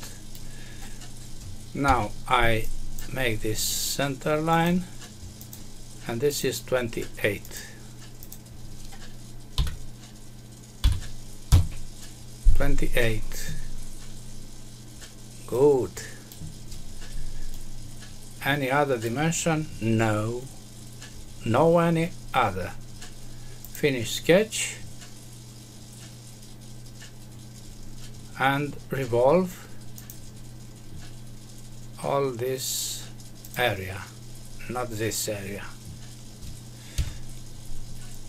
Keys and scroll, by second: 1.8 Escape, 11.4 Return, 36.9 Escape.